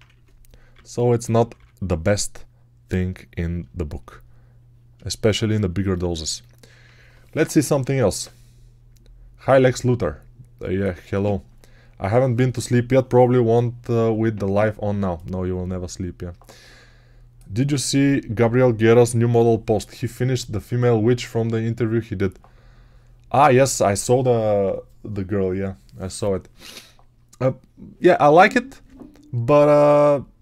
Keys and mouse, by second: 0.0-1.4 typing, 3.5 shift+click, 4.9-6.0 shift+drag, 6.2 alt+click.